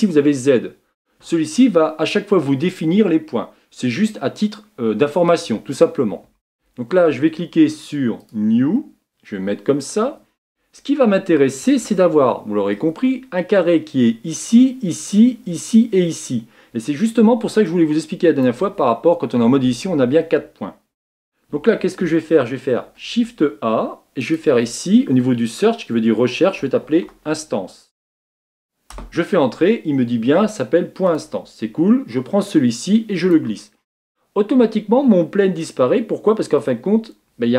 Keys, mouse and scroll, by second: 6.0 Tab, 8.3-8.7 drag, 8.7-33.3 middle drag, 33.3-35.9 drag, 35.9-36.5 scroll down 2, 36.5-37.0 scroll up 2.